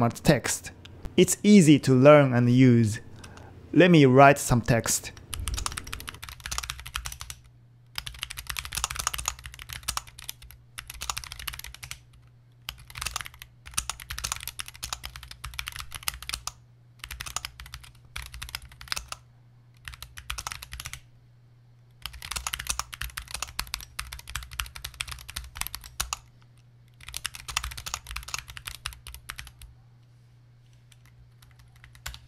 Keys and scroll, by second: 5.1-32.2 typing.